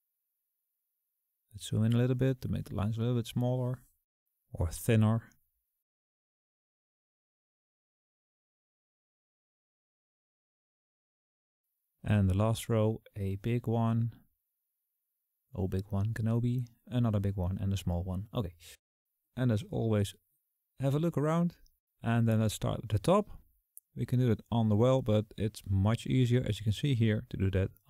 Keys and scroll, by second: 0.1 KP_Add, 0.3 KP_Add.